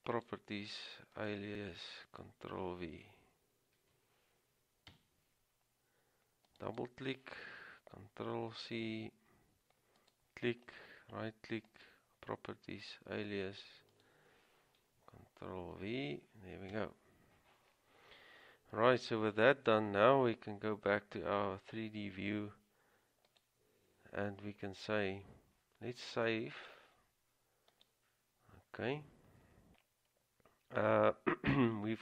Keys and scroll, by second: 3.9 ctrl+v, 5.1 Return, 8.5 ctrl+c, 15.8 ctrl+v, 16.9 Return.